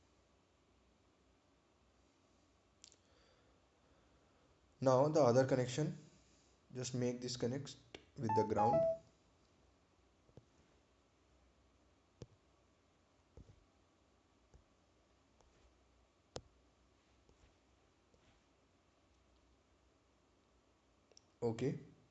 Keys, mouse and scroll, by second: 6.8 scroll down 1, 10.6 scroll up 1, 17.6-18.1 scroll down 1.